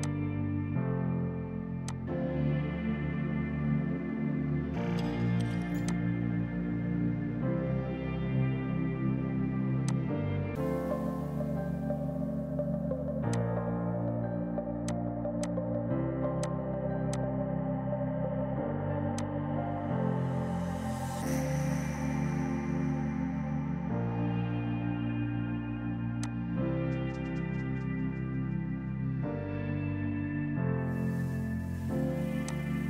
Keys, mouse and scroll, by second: 0.1 click, 5.9 click, 10.5 typing, 13.4 click, 24.8 KP_4, 25.2 KP_Enter, 26.2 click, 27.0 KP_1, 27.2 KP_Enter, 28.3-29.4 typing, 30.5 click.